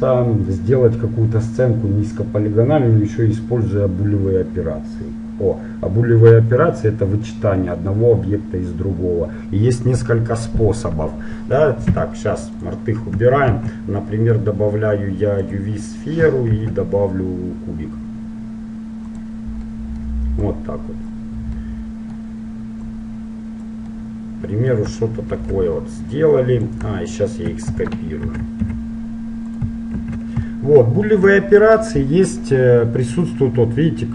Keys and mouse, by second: 12.1 x, 13.5 shift+a, 16.5 shift+a, 19.8-21.1 middle drag, 20.5-21.7 drag, 20.5 right click, 21.7-23.1 middle drag, 23.1-24.7 drag, 23.4 middle click, 23.9-27.3 middle drag, 23.9 right click, 26.3-28.1 drag, 27.3-28.4 right drag, 28.1 middle click, 28.4 shift+d, 30.1 shift+r.